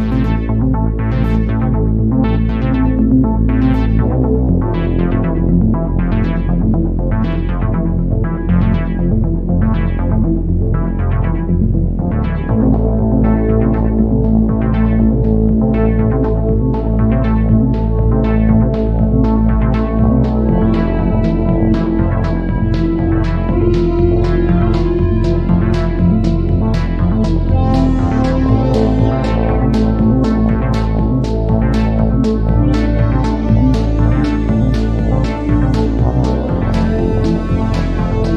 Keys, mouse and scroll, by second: 0.0 click, 1.5 click, 2.0 click, 2.9 click, 3.1 click, 3.5 KP_0, 5.1 right click, 6.3 click, 7.3 shift+f, 14.5 shift+f, 21.3 d, 23.2 shift+f.